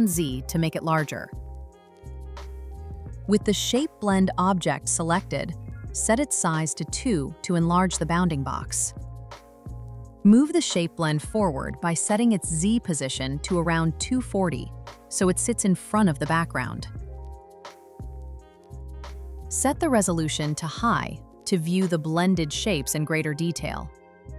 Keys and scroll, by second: 0.0 Return, 1.6 Return, 9.8 Return.